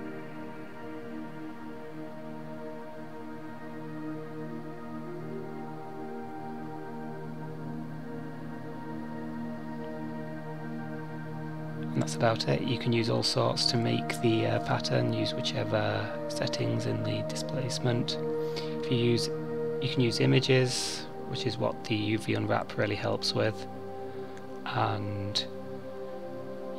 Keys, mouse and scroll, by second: 1.7 click, 3.0 click, 5.5 click, 22.1 click, 22.9-24.0 scroll up 1, 24.0 click.